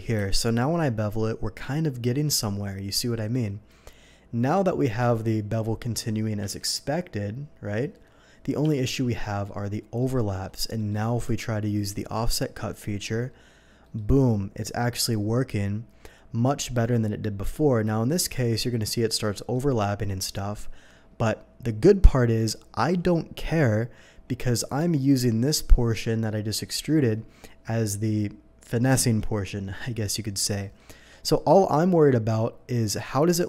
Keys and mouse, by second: 0.1 ctrl+b, 3.3-5.6 drag, 5.0 Escape, 6.4 ctrl+b, 6.4-14.3 drag, 8.6 Escape, 11.2 y, 13.8 y, 20.1-30.7 drag.